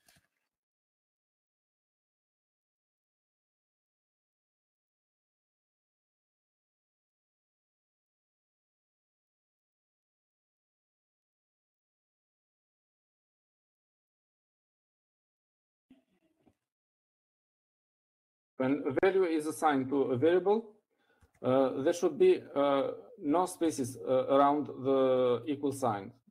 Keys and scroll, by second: 1.5 Escape, 2.0-4.4 typing, 7.4 Up, 7.9 Up, 8.3-9.0 typing, 11.0-11.7 typing, 23.0-23.5 typing, 25.0 typing.